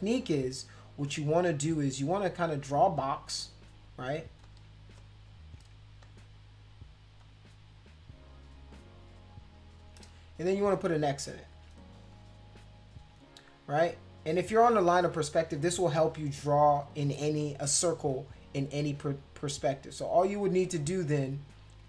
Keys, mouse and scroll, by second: 2.6 click, 3.0 click, 4.4 click, 5.0 shift+click, 6.0 shift+click, 7.2 shift+click, 8.7 shift+click, 9.5 shift+click, 10.5 click, 11.3 shift+click, 12.0 click, 12.8 shift+click, 19.5-21.8 drag.